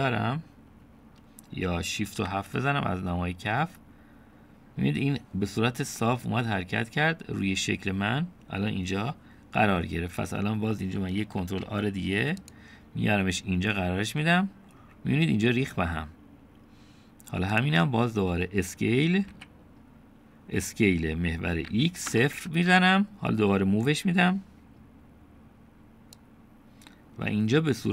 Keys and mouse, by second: 0.0 KP_7, 3.2 shift+KP_7, 12.4 ctrl+r, 20.3 s, 27.2-27.9 drag.